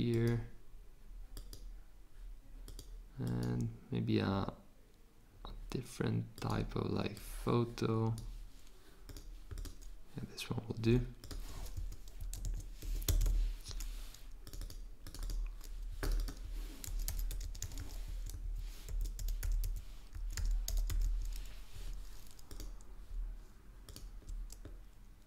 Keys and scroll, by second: 11.7 Return, 12.8 shift+a, 13.2 n, 16.6-21.5 typing.